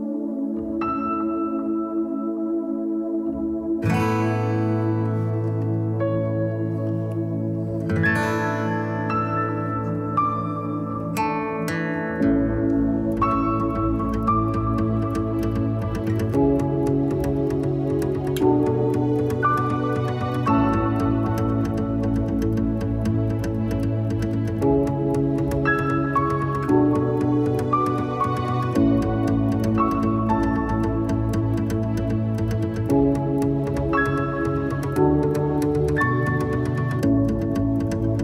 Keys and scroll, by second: 4.1 a, 9.5 s, 19.3 alt+super+r, 19.9 alt+r, 26.8 s.